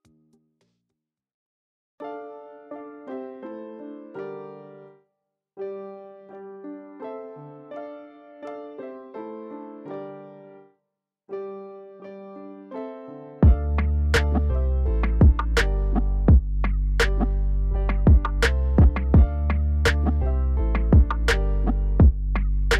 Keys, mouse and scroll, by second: 0.0 shift+a, 0.8 KP_Divide, 1.3-1.7 scroll down 2, 1.7 Tab, 2.0-2.8 scroll down 1, 2.8 shift+z, 3.0 click, 3.3 shift+z, 4.0 s, 5.0 middle click, 5.3 scroll up 2, 6.0-8.2 typing, 6.1 click, 9.5 scroll up 2, 9.7 s, 11.6 g, 12.4 Tab, 13.0 shift+z, 13.2-13.9 scroll down 3, 14.2 right click, 14.9 click, 15.2-15.6 scroll down 1, 15.6 click, 16.5 KP_Divide, 17.3 g, 18.5 KP_7, 18.9-19.6 scroll down 1, 19.6 g, 21.5 KP_1, 22.0-22.3 scroll up 4, 22.3-22.7 shift+middle drag.